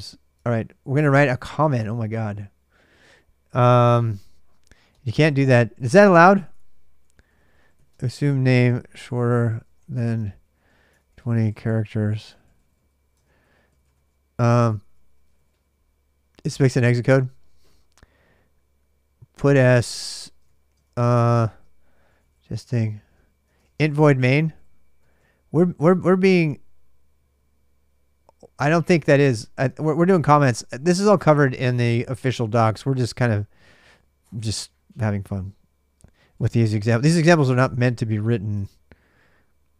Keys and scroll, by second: 0.1 super+Tab, 0.9 ctrl+[, 1.0 ctrl+j, 1.1-3.3 typing, 4.7-15.8 typing, 20.3-25.4 typing, 25.7 alt+Tab, 29.4 alt+Tab, 30.1-33.2 typing, 34.5-37.5 typing, 38.3 Return, 39.4-39.7 typing.